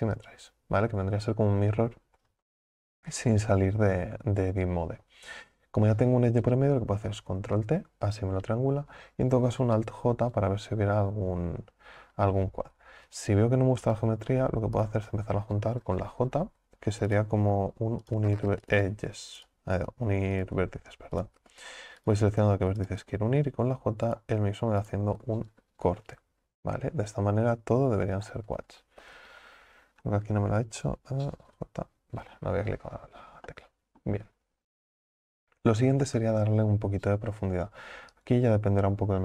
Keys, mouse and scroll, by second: 12.6 ctrl+z, 13.9 right click, 14.8 shift+right click, 17.1 right click, 18.1 shift+right click, 18.7 right click, 19.4 shift+right click, 20.4 right click, 21.2 shift+right click, 22.1 right click, 22.8 shift+right click, 24.1 right click, 24.8 shift+right click, 27.4-28.0 scroll up 1, 28.2 scroll down 1, 30.1 scroll up 5, 30.5-31.5 scroll down 1, 31.5-32.1 scroll down 1, 32.6 scroll down 4, 32.7 scroll up 1, 33.5 middle click, 34.3 Tab, 38.1 click.